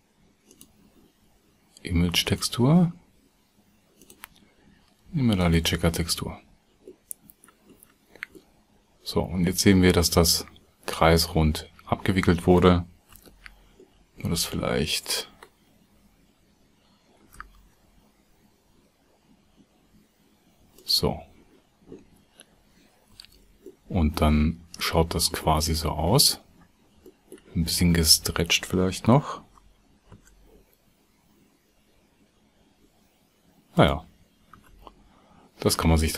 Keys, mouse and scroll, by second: 13.1 Tab, 23.2 Tab, 23.6-24.3 drag, 25.6 click, 27.9 Tab, 29.5 s, 34.5 Tab.